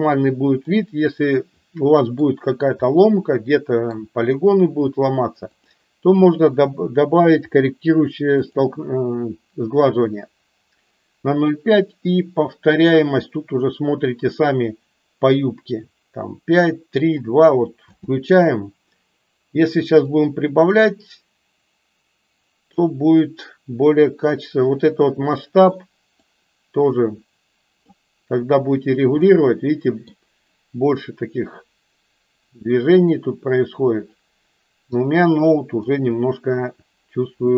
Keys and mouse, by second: 0.6-2.1 middle drag, 2.9-3.9 middle drag, 5.5-8.7 drag, 12.2-17.1 drag, 17.9 space, 20.3-23.1 drag, 26.6-28.1 drag, 29.3-30.5 middle drag, 33.2-36.3 middle drag.